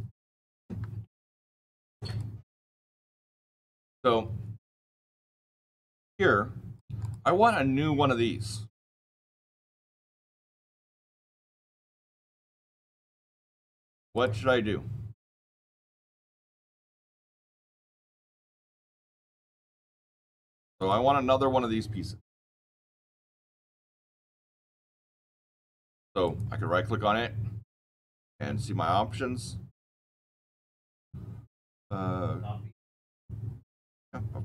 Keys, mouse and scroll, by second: 0.6 Escape, 1.2-2.0 scroll down 9, 2.0 click, 2.4 scroll down 1, 2.5-4.6 scroll, 4.6 click, 4.6 scroll up 10, 5.9 click, 6.9 click, 10.0 click, 12.1 click, 13.0 click, 14.1 right click, 17.0 middle click, 20.7 click, 26.1 click.